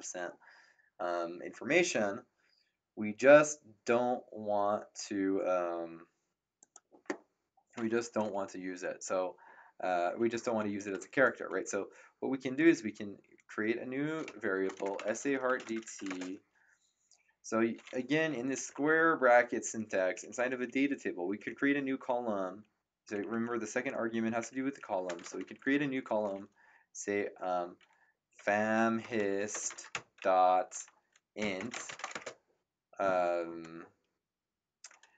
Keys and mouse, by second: 6.6 click, 10.3 Return, 14.0-16.4 typing, 18.3 Left, 18.9 Right, 20.1 Left, 21.3 Right, 21.8 Left, 22.4 Right, 23.0 Left, 23.4 Right, 24.0 Left, 24.2 Right, 24.5 Left, 24.6 Right, 28.0-32.6 typing.